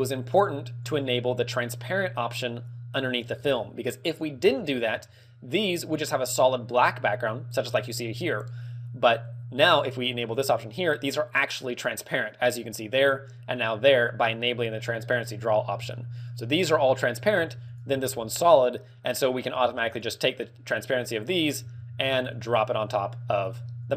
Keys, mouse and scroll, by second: 0.9 click.